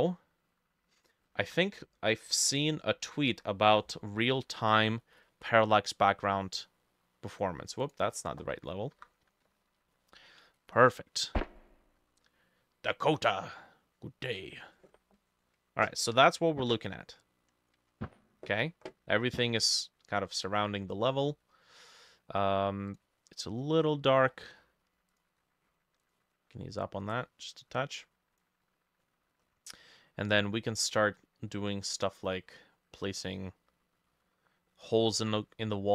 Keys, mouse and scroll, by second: 1.5 ctrl+s, 3.4 F5, 8.6 middle click, 9.0 F6, 24.3-24.8 scroll down 8, 29.1 middle click, 29.5-29.8 scroll up 1, 29.8 middle click, 30.1-30.9 scroll up 2, 30.9 middle click, 31.4 scroll down 1, 31.5 middle click, 32.3 middle click, 33.0 middle click, 33.6 middle click, 34.8 middle click, 35.4 middle click.